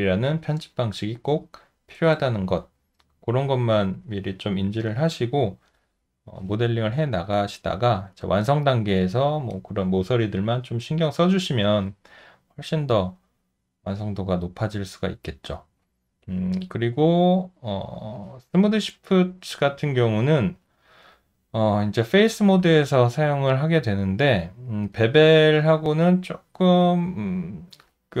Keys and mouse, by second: 8.0 alt+middle click, 16.6 alt+click, 17.2 alt+middle click, 22.9 alt+middle click, 24.1 alt+middle click, 24.9 alt+right click, 25.6 alt+middle click, 26.8 alt+click.